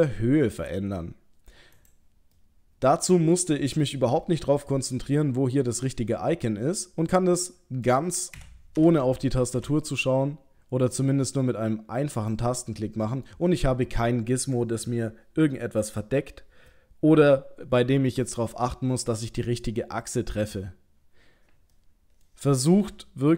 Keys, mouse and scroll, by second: 2.4 middle click, 7.5 middle click, 8.4 g, 12.7 middle click, 16.8 middle click, 21.8 middle click, 22.8 g.